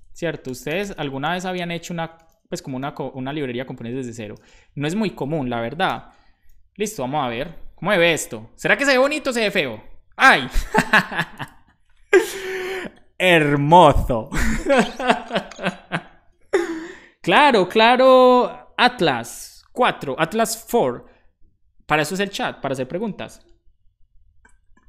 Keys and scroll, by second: 2.0 a, 4.1-5.0 typing, 6.3 super+s.